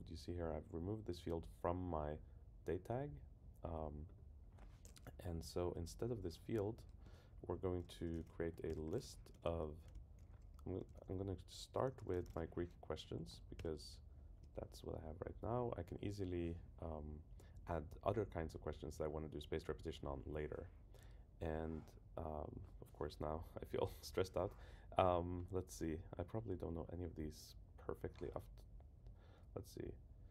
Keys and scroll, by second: 5.4 shift+Down, 7.0 Return, 8.7 super+k, 9.3 Return, 13.2 Down, 13.6 Return, 15.9 Down.